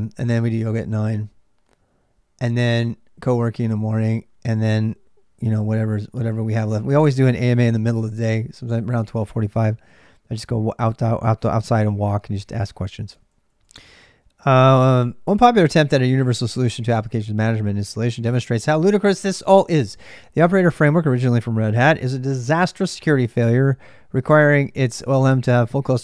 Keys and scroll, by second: 0.0-26.0 typing.